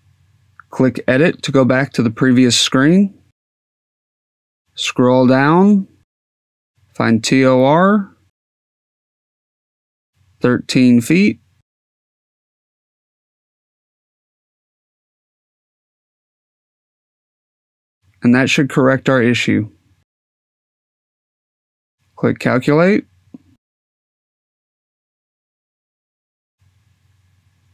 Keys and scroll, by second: 13.2 1, 13.6 3.